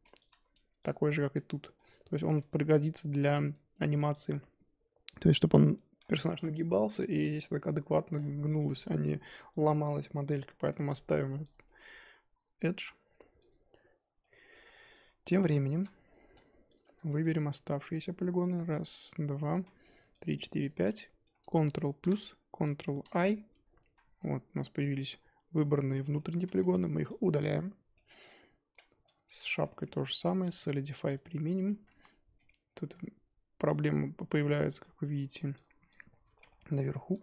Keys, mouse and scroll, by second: 0.0 Tab, 0.2 click, 0.3 Tab, 0.9 click, 1.3-1.8 middle drag, 1.8 Tab, 2.2 Tab, 2.4 Tab, 2.9 scroll down 2, 3.1 Tab, 3.5 Tab, 4.2 click, 8.1 scroll down 3, 8.4-10.8 middle drag, 10.8-11.5 scroll up 4, 11.5 click, 11.6 Tab, 12.5 scroll up 2, 12.7 3, 13.5 alt+click, 14.2-14.6 middle drag, 14.6-15.3 scroll down 2, 15.3 alt+click, 17.1 z, 17.2 middle click, 17.9 z, 18.0-18.6 middle drag, 18.6 z, 18.9-19.6 middle drag, 19.6 z, 19.8-20.1 scroll up 1, 20.1 shift+click, 20.4 shift+click, 20.9-22.0 middle drag, 22.0 ctrl+KP_Add, 23.0 ctrl+i, 23.9 z, 24.1 scroll down 3, 24.3-26.4 middle drag, 26.4 z, 27.9-28.9 middle drag, 28.9 Tab, 29.1 click, 29.4-31.1 shift+middle drag, 31.1 click, 31.7 ctrl+z, 32.0-32.5 middle drag, 32.5 Tab, 35.9 click, 36.3 middle click, 36.5-37.1 scroll up 1, 37.1 scroll down 1.